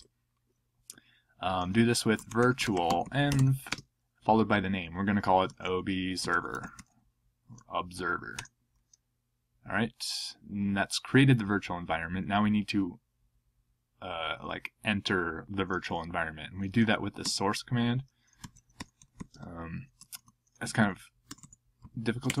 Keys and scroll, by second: 1.9-3.7 typing, 5.2-7.2 typing, 8.3 Return, 17.2-22.4 typing.